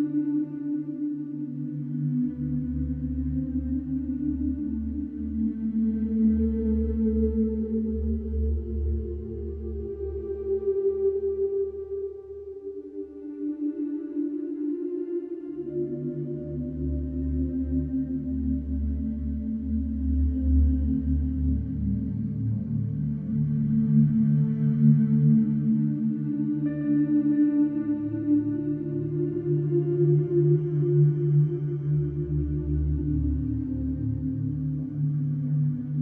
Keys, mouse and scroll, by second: 1.3 click, 4.0 click, 7.1 Delete, 7.4 click, 8.1 Delete, 8.6 click, 9.2 Delete, 9.5 middle click, 10.2 click, 11.1 Delete, 11.4 middle click, 12.8 click, 13.2 Delete, 13.7 middle click, 14.6 click, 16.0 Delete, 17.1 click, 17.6 Delete, 18.3 click, 21.1 Delete, 22.2 middle click, 23.4 click, 24.5 Delete, 26.2 click, 26.5 Delete, 27.8 middle click, 29.5 click, 31.8 click, 32.8 right click, 34.1 click, 35.3 right click.